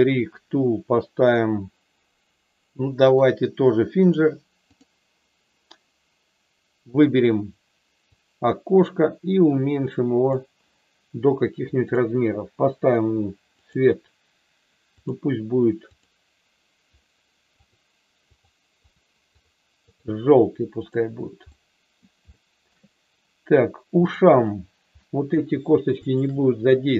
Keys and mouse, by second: 3.1-4.1 drag, 4.7 click, 6.7 click, 8.0-10.4 drag, 11.9 click, 13.5 click, 15.9 click, 17.6 click, 18.2 click, 18.9 click, 19.3 click, 19.7 click, 20.7 click, 21.5 middle click, 22.2 shift+middle click, 25.0 middle click.